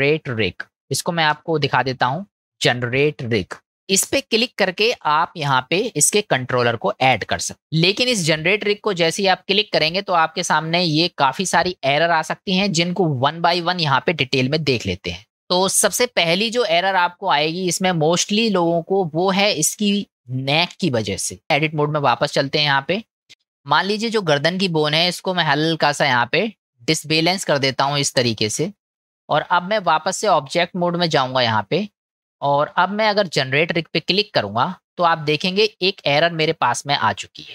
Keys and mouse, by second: 15.2 shift+middle click, 16.5-17.3 middle drag, 18.2-19.1 middle drag, 20.6-21.4 middle drag, 21.4 click, 23.3 ctrl+z, 23.9 click, 26.3-28.8 drag, 29.0 middle click, 30.1-30.9 drag, 31.5 click, 32.3 middle click, 34.3 click.